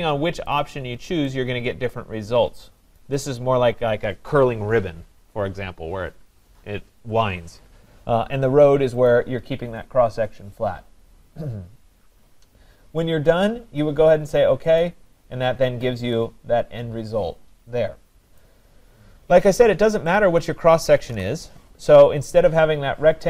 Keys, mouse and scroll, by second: 0.6 click, 3.0 right click, 9.1 click, 14.8 click, 15.7 middle click, 16.2 middle click, 18.4 right click, 18.8 middle click, 19.0 middle click, 20.1 click, 21.0 scroll, 21.1 Delete.